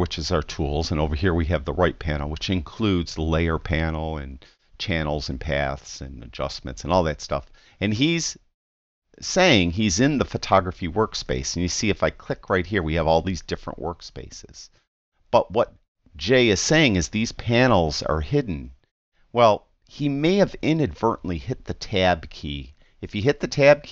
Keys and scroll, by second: 22.9 Tab.